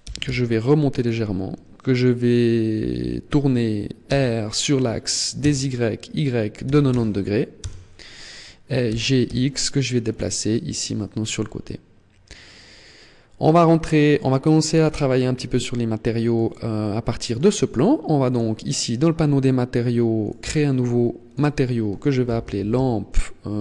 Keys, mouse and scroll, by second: 0.7 click, 3.8 r, 8.6 g, 9.9 click, 10.1 middle click, 12.3 middle click, 16.0 middle click, 16.4 middle click, 17.9 click, 19.9 click, 20.9 click.